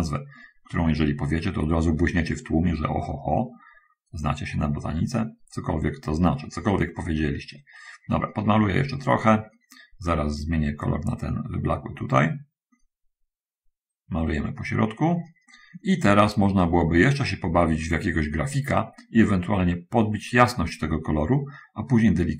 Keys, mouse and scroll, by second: 0.6 click, 2.1-10.1 drag, 11.1 click, 12.2-18.4 drag, 19.6-20.9 drag, 21.5 click.